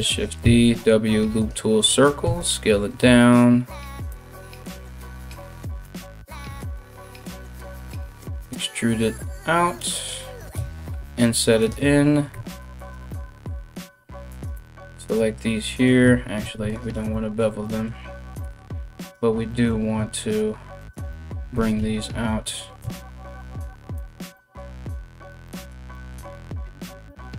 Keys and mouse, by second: 0.0 w, 1.8 s, 5.4 g, 6.8 e, 11.2 i, 11.9 2, 12.3 alt+right click, 13.9 alt+shift+right click, 16.0 ctrl+r, 18.6 click, 18.7-20.4 middle drag, 20.4 ctrl+click, 20.5-27.3 ctrl+middle drag, 21.1 g, 26.6 ctrl+r.